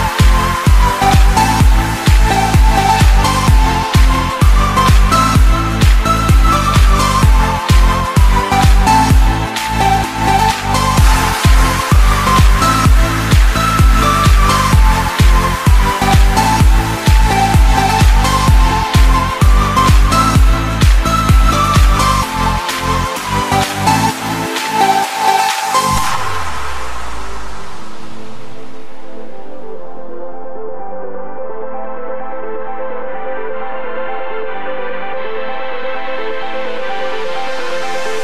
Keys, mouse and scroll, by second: 17.5 click, 17.8 ctrl+z, 18.1 ctrl+z, 19.1-19.8 scroll down 10, 20.3-21.3 shift+middle drag, 21.3-22.4 drag, 23.3 KP_7, 24.3 shift+a, 29.5-31.3 drag, 31.3 s.